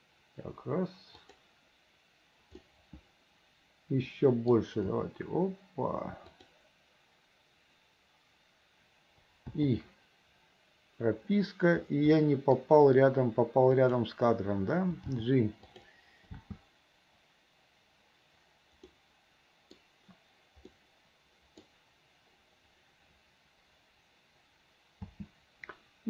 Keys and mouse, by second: 2.8-4.7 drag, 5.0 r, 12.3 click, 13.9 click, 15.1 g, 16.4 space, 19.0 click, 20.8-21.8 drag, 25.1 space.